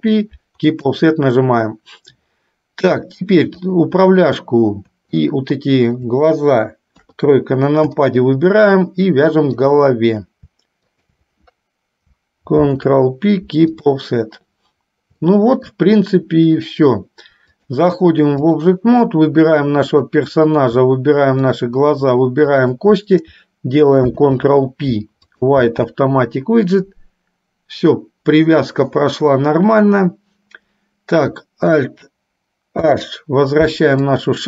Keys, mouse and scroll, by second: 3.8 click, 5.3-6.3 shift+drag, 7.1 KP_3, 8.3-9.9 shift+middle drag, 11.0 shift+click, 12.8 ctrl+p, 15.3 shift+middle click, 17.6-18.9 drag, 20.1 click, 21.5 shift+click, 22.8 shift+click, 24.1 ctrl+p, 32.9 alt+h, 34.3 click.